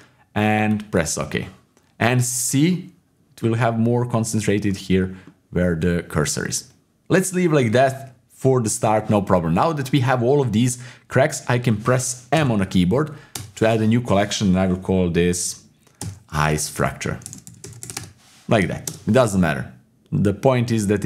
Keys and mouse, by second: 4.7 middle click, 5.2-6.3 middle drag, 6.5 middle click, 7.3 middle click, 12.3 m.